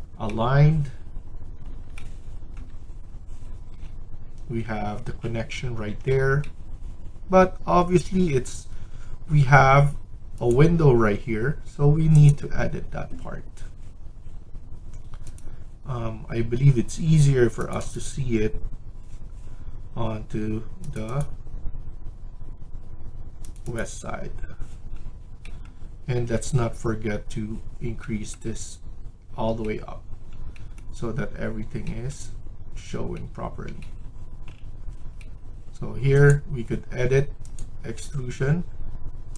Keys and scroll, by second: 26.0 Escape.